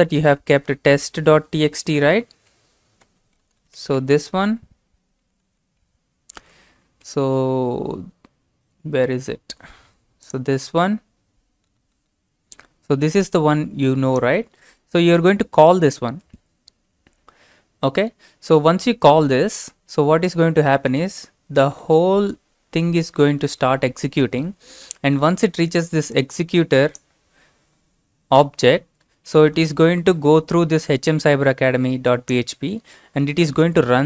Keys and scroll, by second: 1.2-2.0 typing, 6.2-6.9 typing, 7.0 alt+Tab.